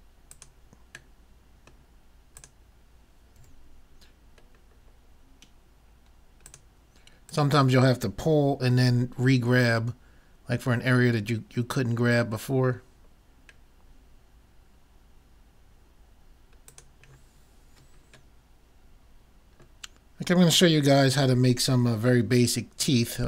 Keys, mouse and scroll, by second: 1.4-2.7 middle drag, 3.2 right click, 3.5 g, 3.7 right click, 6.6 click, 8.8 g, 12.8 middle click, 13.3 middle click, 13.7 middle click, 14.2 middle click, 17.1 middle click.